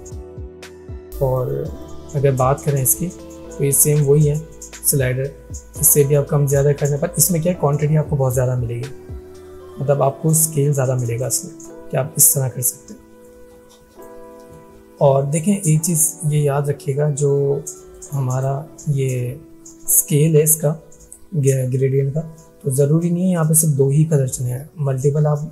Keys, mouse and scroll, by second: 4.9-11.4 drag, 17.9-18.6 drag.